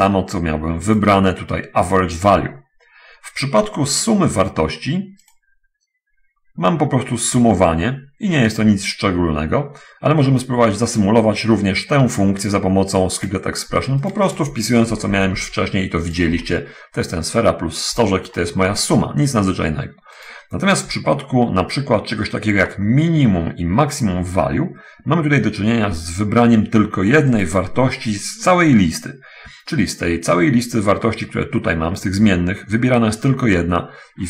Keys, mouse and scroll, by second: 1.3 click, 5.7 click, 11.3 click, 14.4 click, 15.1 BackSpace, 15.7 BackSpace, 16.5 click, 18.1 Return, 20.6 click, 27.7 click, 30.9-31.7 scroll down 1.